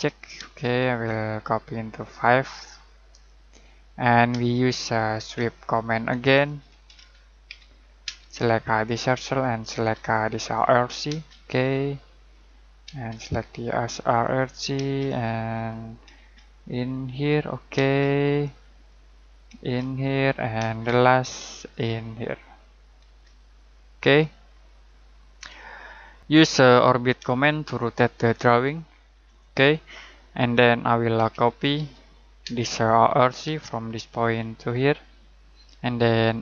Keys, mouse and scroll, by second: 0.0 click, 0.3 space, 0.6 click, 4.3-8.0 typing, 5.9 Escape, 8.9 click, 9.6 space, 10.4 click, 11.0 space, 12.3 click, 12.8 space, 14.2 click, 14.7 space, 15.5 click, 16.1 space, 17.2 click, 17.7 space, 18.6 click, 19.5 space, 20.1 click, 20.5 space, 21.5 click, 23.0 space, 23.5 click, 24.4 middle click, 25.0 scroll up 1, 25.6-26.2 scroll down 1, 27.5 shift+middle click, 29.2 middle click, 29.7-30.5 scroll up 1, 30.5 middle click, 31.1-32.4 typing, 32.9 click, 33.4 space, 34.2 click.